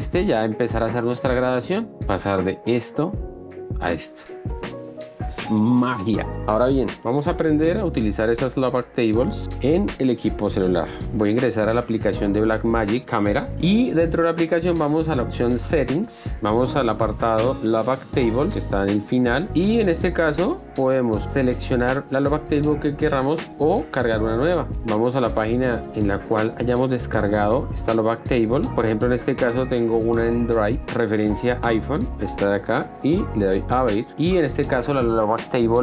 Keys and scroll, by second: 3.8 shift+d.